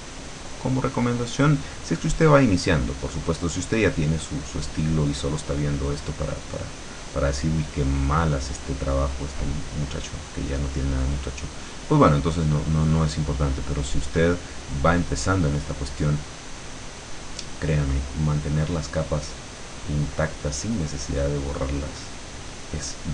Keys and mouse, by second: 0.1-2.3 drag, 3.0 click, 4.5-5.6 drag, 6.7-8.1 drag, 8.6-10.5 drag, 11.3 click, 12.7-14.3 drag, 14.6 click, 15.8-17.2 drag, 17.8 click, 19.0 click, 19.9 click, 21.3 click, 22.6-23.1 drag.